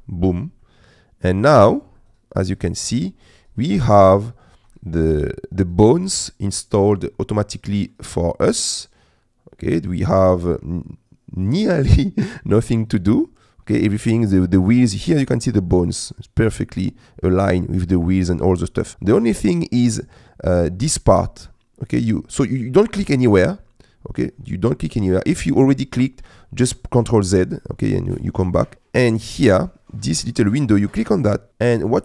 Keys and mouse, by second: 0.7-1.8 middle drag, 2.0 middle click, 2.6 middle click, 4.4 shift+middle click, 4.9 middle click, 6.7 middle click, 7.5 middle click, 8.4-12.4 middle drag, 12.6 middle click, 14.0 middle click, 15.8 middle click, 16.8-17.9 middle drag, 18.0 middle click, 18.6 click, 18.8 middle click, 19.2 middle click, 30.9 click.